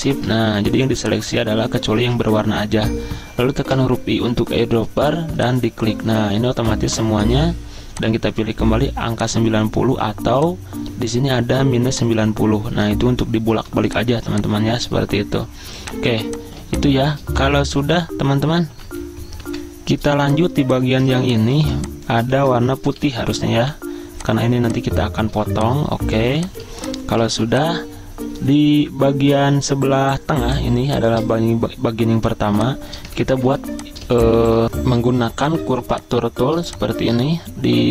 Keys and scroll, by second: 2.0 ctrl+z, 3.8 i, 13.6 v, 14.4 z, 15.7 v, 19.4 F10, 20.5-23.0 typing, 22.4 ctrl+z, 25.3 z, 26.6 v, 30.8 space, 33.1 ctrl+z, 34.6 Delete.